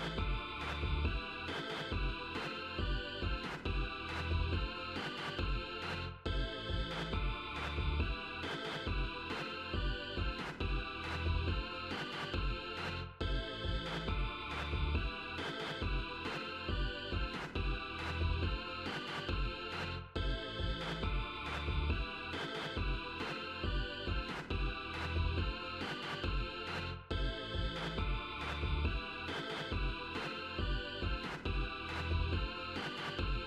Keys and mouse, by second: 0.7 click, 2.5 ctrl+z, 4.5 click, 5.7 click, 6.5 click, 7.5 click, 12.5 click, 13.9 click, 20.1 ctrl+z, 22.1 click, 23.6 click, 24.5 click, 26.0 click, 27.8 click, 28.4 click, 29.0 click, 29.4 click, 29.9 click, 30.3-31.8 drag.